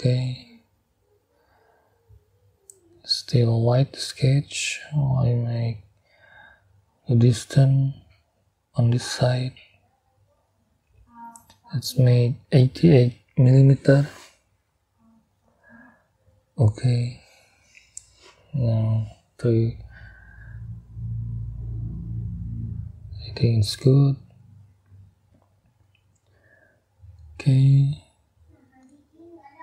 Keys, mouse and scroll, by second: 0.4 click, 1.9 click, 3.9-6.2 drag, 6.6 click, 9.3 click, 10.8 click, 14.0 8, 15.9 click, 16.5 click, 18.5 click, 19.5-20.6 middle drag, 21.9 double click, 22.8-24.1 middle drag, 24.1-25.9 middle drag, 26.6 middle click, 29.4 middle click.